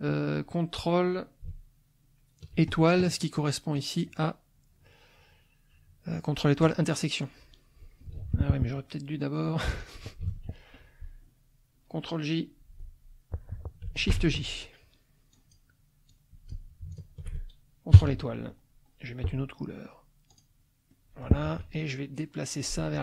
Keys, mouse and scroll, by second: 3.8 click, 6.6 click, 8.2 ctrl+z, 9.8 click, 10.3 ctrl+a, 14.1 shift+j, 15.3 click, 16.1 click, 16.9 shift+click, 18.0 ctrl+KP_Multiply, 20.3 click, 20.9 middle click, 21.5 F1.